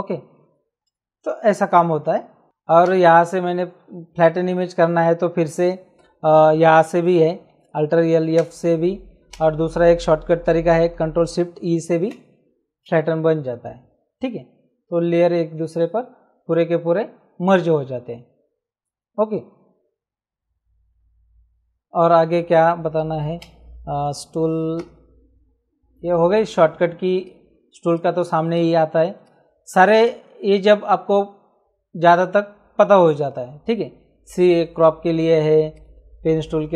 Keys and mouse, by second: 2.8 ctrl+z, 8.2 alt+f, 9.3 ctrl+z, 11.8 ctrl+shift+e, 23.4 c, 24.8 w, 27.2 right click, 35.7 right click.